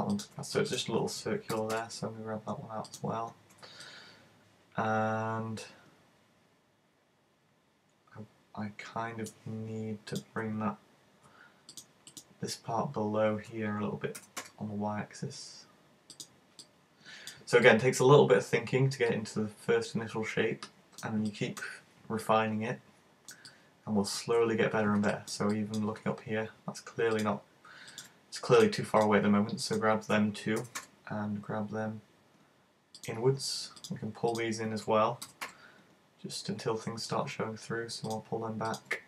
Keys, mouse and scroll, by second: 0.2 middle click, 0.7 right click, 1.6 g, 3.0 click, 3.9 middle click, 10.1 right click, 11.7 shift+right click, 11.9 shift+right click, 12.1 shift+right click, 14.2 g, 16.3 click, 16.7 middle click, 17.6 middle click, 21.3 middle click, 22.2 middle click, 25.1 middle click, 25.6 middle click, 27.2 shift+right click, 28.0 shift+right click, 28.6 right click, 29.0 right click, 29.7 shift+right click, 33.8 right click, 34.4 shift+right click, 35.3 g, 38.2 click, 38.7 right click.